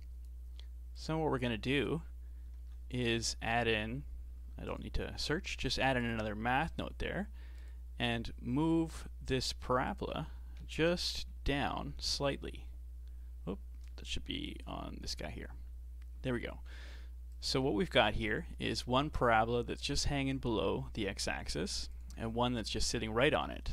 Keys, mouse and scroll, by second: 2.6 shift+a, 5.6 shift+d, 6.7-9.7 drag, 9.9-12.9 drag, 14.5-20.4 alt+drag, 21.9 ctrl+shift+click, 23.5-23.7 shift+middle drag.